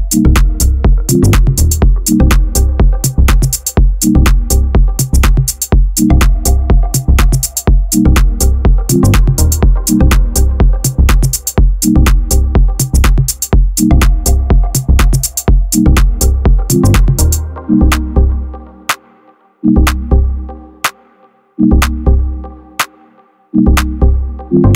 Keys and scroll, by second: 0.1 1, 2.2 j, 4.1 j, 4.6 a, 7.3 a, 7.5 r, 9.2 Tab, 10.0 ctrl+alt+shift+c, 12.0 KP_Decimal.